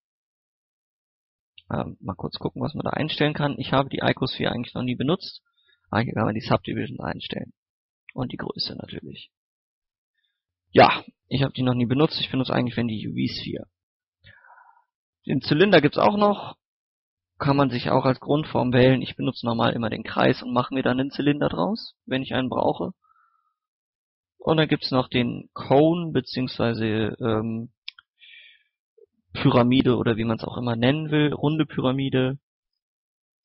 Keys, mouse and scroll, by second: 0.4-1.0 typing, 0.5 click, 2.3 click, 3.2 scroll down 1, 3.4 middle click, 3.7-4.0 scroll up 1, 4.3 scroll down 1, 4.7 scroll up 1, 5.4-10.1 drag, 10.7 x, 10.9 click, 11.7 shift+a, 15.0 click, 15.7 scroll up 1, 15.8 scroll down 1, 16.1 middle click, 16.3-16.7 scroll up 1, 16.7-21.2 middle drag, 22.5 x, 22.8 click, 23.0 shift+a, 24.3 click, 24.7 scroll down 1, 24.9 middle click, 25.0 scroll up 1, 25.4-28.4 middle drag, 28.4 click, 29.9-32.2 middle drag, 32.2-32.6 scroll down 1, 32.6 scroll up 1.